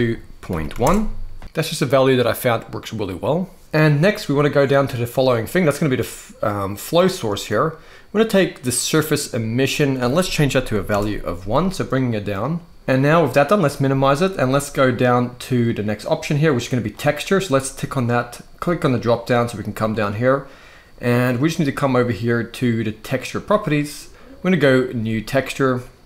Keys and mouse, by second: 4.8 click, 9.4-10.7 drag, 13.4 click, 15.5 click, 16.7-18.0 drag, 24.5 click.